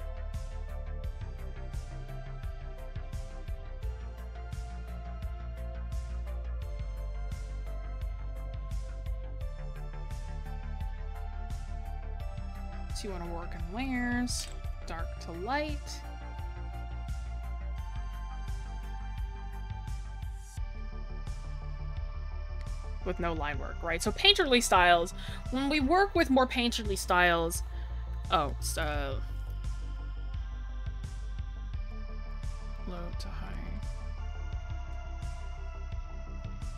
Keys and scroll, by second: 23.3 space, 29.2 ctrl+z.